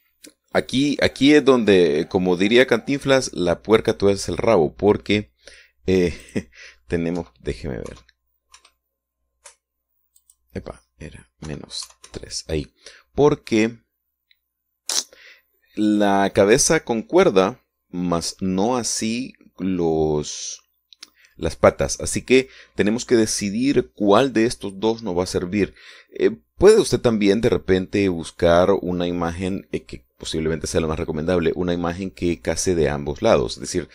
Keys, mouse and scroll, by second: 0.4-3.4 scroll down 1, 3.4 scroll up 1, 7.3 click, 8.2 KP_Decimal, 8.9 KP_3, 9.6 KP_Enter, 11.3 click, 12.5 KP_Subtract, 12.9 KP_3, 13.1 KP_Enter.